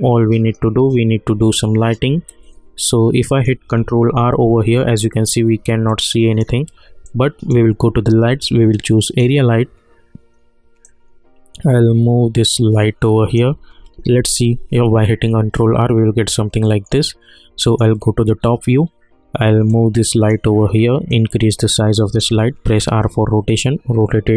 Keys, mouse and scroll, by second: 0.8-4.1 alt+middle drag, 4.1 ctrl+r, 5.9-14.0 alt+drag, 14.0 ctrl+r, 16.6 middle click, 18.0 scroll down 1, 19.7-22.7 drag, 22.7 r, 23.5-24.3 drag.